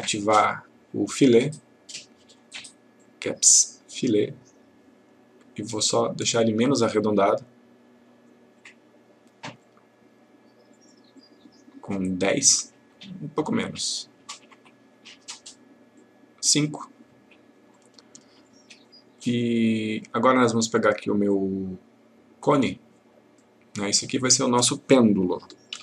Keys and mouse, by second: 3.0 click, 9.6-12.7 click, 17.7-18.6 click, 23.3 click, 25.7 shift+p.